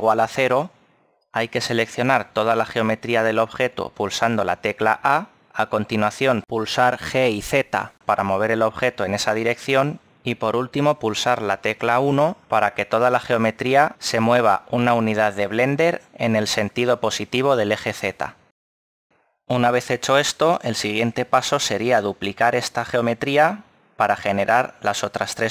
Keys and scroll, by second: 5.3 a, 9.4 g, 11.1 z, 14.8 1.